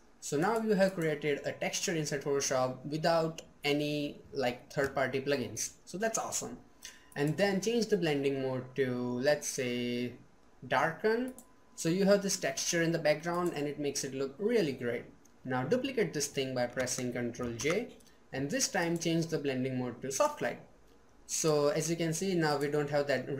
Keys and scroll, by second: 16.9 ctrl+j.